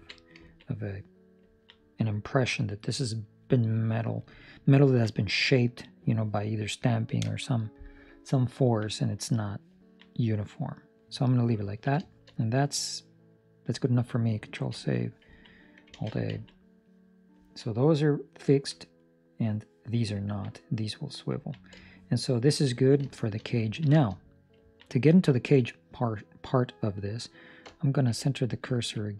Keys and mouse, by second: 0.4 ctrl+middle click, 0.6 middle click, 1.4 ctrl+middle click, 1.7 middle click, 4.6 ctrl+middle click, 5.0 middle click, 8.5 ctrl+middle click, 8.8 middle click, 9.7 ctrl+middle click, 10.0 middle click, 11.6 ctrl+middle click, 12.0 shift+middle click, 12.3 middle click, 14.5 ctrl+s, 15.3 ctrl+middle click, 15.9 alt+a, 16.4 ctrl+middle click, 16.5 middle click, 17.3 ctrl+middle click, 17.7 middle click, 18.5 ctrl+middle click, 18.9 middle click, 20.3 ctrl+middle click, 20.5 middle click, 21.4 ctrl+middle click, 21.9 shift+middle click, 22.8 ctrl+middle click, 23.2 shift+middle click, 23.6 ctrl+middle click, 23.9 shift+middle click, 24.1 middle click, 24.7 ctrl+middle click, 25.7 middle click, 28.7 ctrl+middle click, 28.9 middle click.